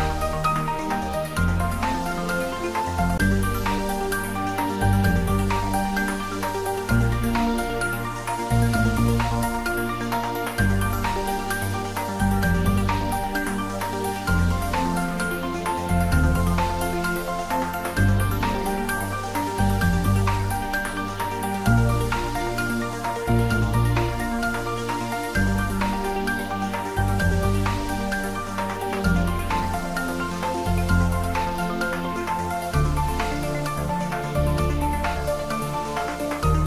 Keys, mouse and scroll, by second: 1.0-1.5 scroll down 1, 4.3 click, 5.8-9.8 middle drag, 9.8 shift+click, 15.1 shift+click, 17.8 shift+click, 21.1 shift+click, 24.2 ctrl+j, 27.1 click, 33.6 click, 34.7-35.5 scroll down 1.